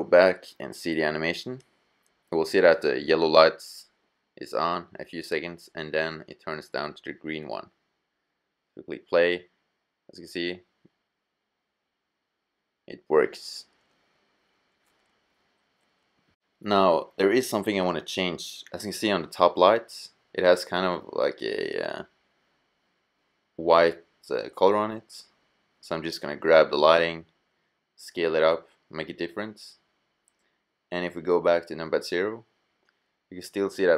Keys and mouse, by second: 0.8 click, 7.1-8.7 drag, 15.0-17.6 drag, 18.3-18.7 drag, 18.7-20.3 middle drag, 21.3-23.5 middle drag, 24.3-25.7 middle drag, 25.7 g, 26.1 middle click, 27.0 s, 28.5 middle click, 29.6-30.4 middle drag, 31.2 KP_0.